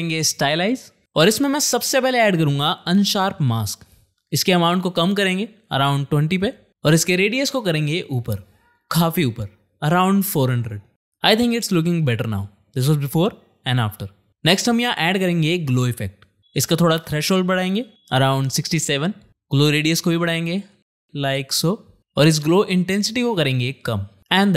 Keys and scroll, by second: 0.0-1.1 typing, 1.9 ctrl+space, 2.3-3.6 typing, 3.6 Return, 10.0-10.8 typing, 14.9 ctrl+space, 15.1-15.5 typing, 16.0 Return.